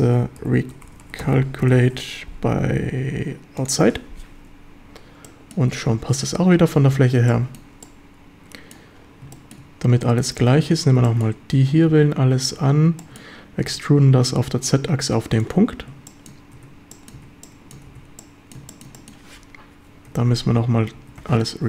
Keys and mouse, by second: 5.3 drag, 5.6 Tab, 6.1-6.7 drag, 7.0 ctrl+s, 7.3 shift+click, 7.8-8.6 drag, 8.6 middle click, 9.3 shift+middle drag, 10.5 Tab, 11.0 shift+middle drag, 11.9 a, 12.3 a, 13.0 shift+drag, 13.7 e, 15.4 ctrl+click, 16.1 shift+drag, 16.6 Tab, 16.9 click, 17.2 a, 17.4-17.8 drag, 17.9 ctrl+s, 18.2 middle click, 18.2-18.6 drag, 18.7 shift+click, 19.0 click, 20.1 Tab, 20.5 a, 21.0 a, 21.2 space.